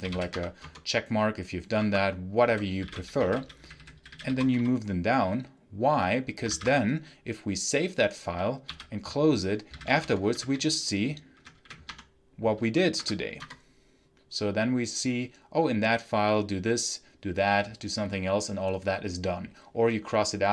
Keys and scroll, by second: 0.0-0.5 typing, 1.7 Escape, 2.1-4.9 typing, 6.4 ctrl+s, 8.6 ctrl+q, 9.3-11.3 typing, 11.8 Tab, 12.5 4, 12.8 Tab, 13.4 Return.